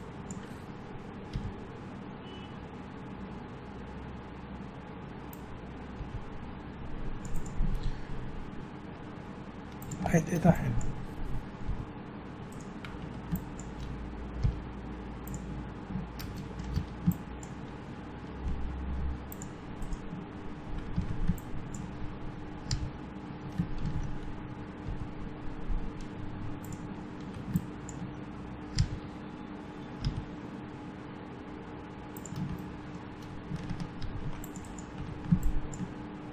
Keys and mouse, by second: 1.4 g, 6.0 g, 7.7 g, 10.5-11.7 drag, 11.7 g, 13.0 a, 14.4 g, 16.8 a, 17.1-18.7 drag, 19.8 click, 19.8 right click, 21.0 a, 22.7 f, 23.8 ctrl+z, 24.9 g, 27.1 a, 27.5-29.4 drag, 28.8 f, 30.0 g, 32.6 click, 33.2 middle click, 34.0 ctrl+r, 35.0 a, 35.5-36.3 drag.